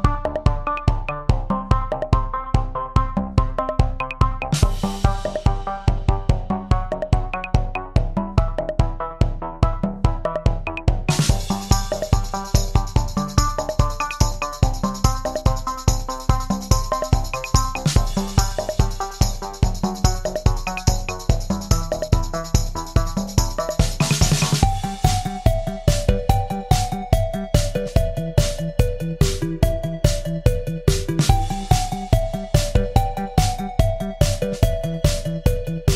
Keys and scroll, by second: 0.8 Escape, 1.7 ctrl+a, 7.5 Left, 32.7 Escape, 33.5 ctrl+a.